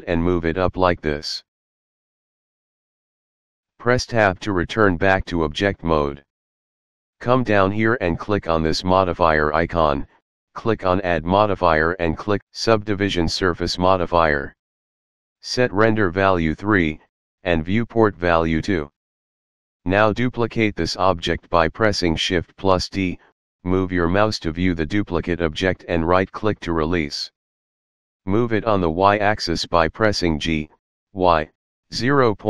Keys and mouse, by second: 0.7 ctrl+r, 1.3 click, 2.5 click, 5.1 Tab, 8.2 click, 10.2 click, 10.8 click, 14.1 click, 16.6 click, 22.5 shift+d, 25.4 right click, 27.8 g, 28.5 y, 30.4 KP_Decimal.